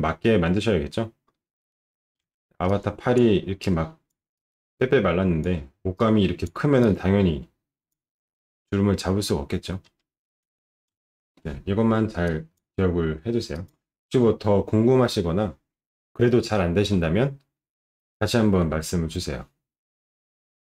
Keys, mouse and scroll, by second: 2.2 ctrl+shift+9, 2.5 ctrl+shift+9, 13.5 click.